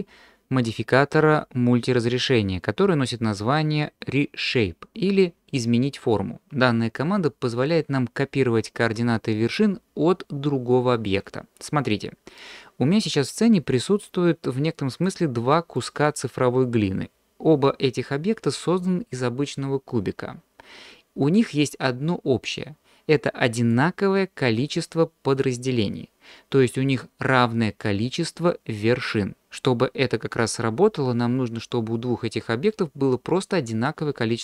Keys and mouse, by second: 15.0 click, 15.7 click, 25.3 click.